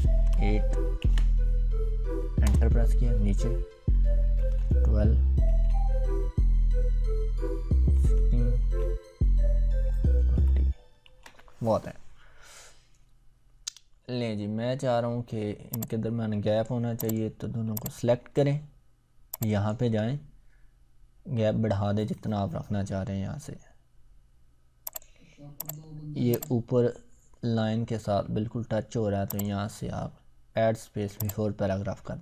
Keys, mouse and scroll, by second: 1.0 ctrl+v, 8.3 ctrl+v, 15.9-16.8 drag, 24.9 click, 29.3 click.